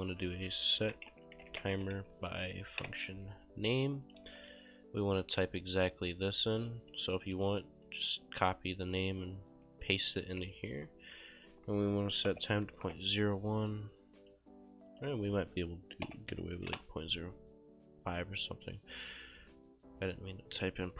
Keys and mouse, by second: 0.0 click, 0.3-2.5 typing, 2.6 Down, 2.9 KP_Enter, 4.1 shift+click, 4.3 q, 4.4 click, 4.7 right click, 5.8 click, 7.4 ctrl+c, 7.9 right click, 10.0 click, 10.3 ctrl+v, 10.5 click, 12.1-13.2 typing, 14.3 click, 16.7 typing, 16.8 shift+Return, 18.7 click, 20.7 click.